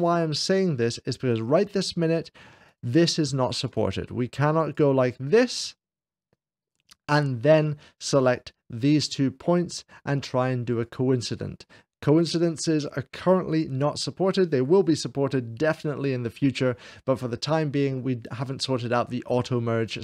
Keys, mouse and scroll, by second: 2.5-5.5 drag, 6.5-7.5 drag, 8.0 right click, 8.3-10.5 drag, 10.9 click.